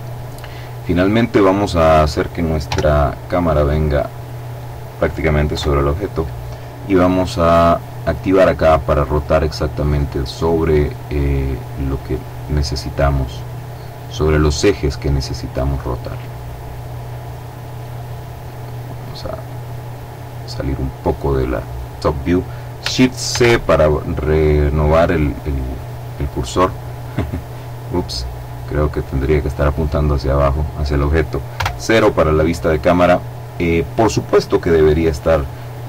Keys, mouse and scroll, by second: 1.2 right click, 2.0 g, 3.5 click, 4.9 KP_7, 7.3 click, 8.4-12.5 drag, 12.7-15.6 drag, 16.2-17.5 drag, 17.8-18.9 middle drag, 18.9-21.2 drag, 22.6 shift+c, 25.1-26.8 middle drag, 27.5-30.3 drag, 30.9 KP_0.